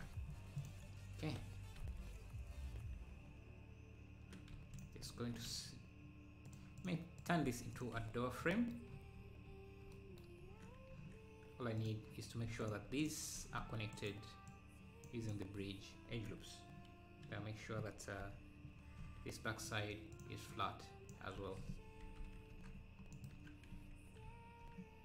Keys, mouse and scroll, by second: 6.5 click, 7.4 x, 9.3 scroll up 1, 11.8-13.5 drag, 13.5 scroll down 1, 14.0-15.7 right drag, 18.3 KP_7, 19.0 z, 20.2-21.4 drag, 21.4 s, 23.4 Tab.